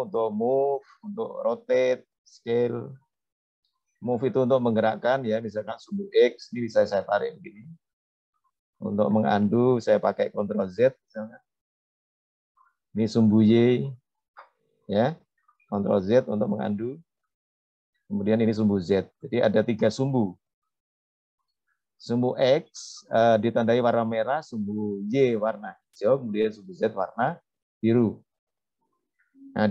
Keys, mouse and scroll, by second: 3.8 click, 6.8-9.0 drag, 10.6 ctrl+z, 13.3-15.2 drag, 16.8 ctrl+z, 19.1-20.1 drag, 21.2 ctrl+z, 28.2-29.7 scroll up 2.